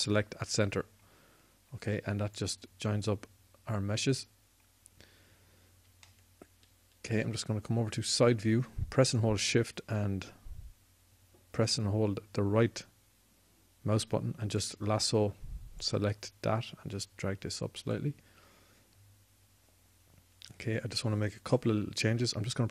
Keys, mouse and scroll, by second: 0.9 alt+m, 16.5-18.7 drag.